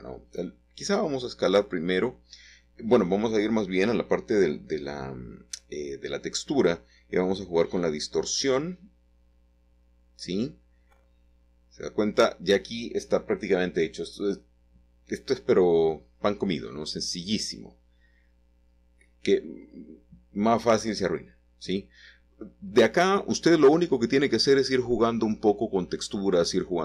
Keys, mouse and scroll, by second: 5.1-5.4 typing, 5.4 Return, 7.2 middle click, 9.5-10.9 scroll down 1, 10.2-12.7 middle drag, 12.2 scroll up 1, 12.9-14.1 shift+middle drag, 13.8 scroll up 1, 14.3 shift+middle click, 17.6-25.7 drag, 25.9-26.8 scroll down 1.